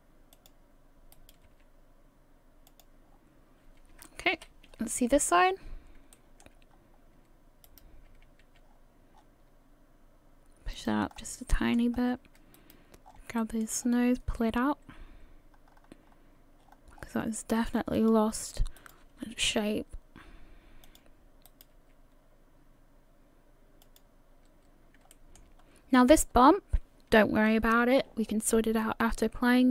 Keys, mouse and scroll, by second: 1.1 right click, 1.5 g, 3.1 scroll down 4, 4.4 KP_3, 5.3-6.0 scroll up 1, 6.1 shift+middle click, 7.5 scroll up 2, 7.7 right click, 9.2 g, 11.1 scroll up 2, 11.5 shift+middle click, 11.9 scroll up 2, 12.6 right click, 13.0 scroll down 3, 13.4 shift+middle click, 13.8-14.3 scroll up 2, 14.5 g, 18.8 right click, 19.4 g, 21.5 right click, 21.8 g, 25.1 shift+middle click, 25.6-26.0 scroll up 1.